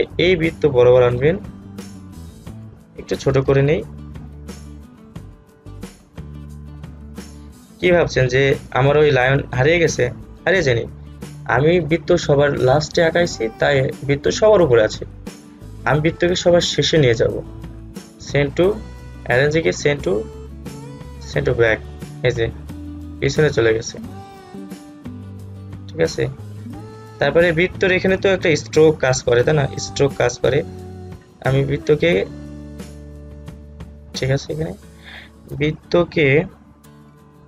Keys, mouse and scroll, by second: 5.4-13.0 alt+drag, 17.7 right click, 19.6-28.8 drag, 28.8 alt+scroll up 1, 30.9-37.4 drag.